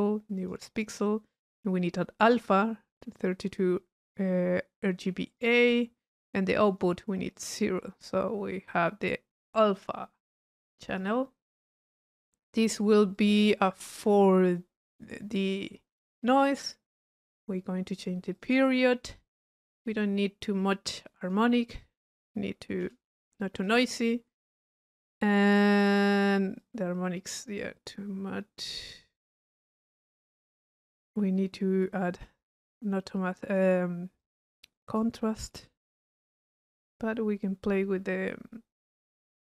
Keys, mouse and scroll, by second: 0.4 click, 0.8 click, 5.3 click, 6.0 click, 6.7 click, 7.4 click, 9.3-10.9 middle drag, 13.2 click, 13.9 click, 15.4 click, 18.4 click, 19.9 click, 21.8-22.1 drag, 25.9 click, 32.0-33.6 drag, 34.2 click, 37.0-39.5 drag.